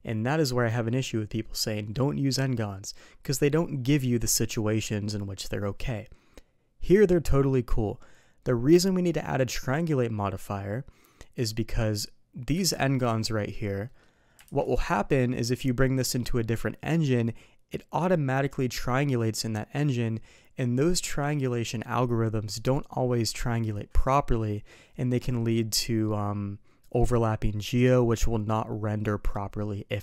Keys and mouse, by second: 12.6 alt+v, 13.9 middle click, 14.4 alt+v.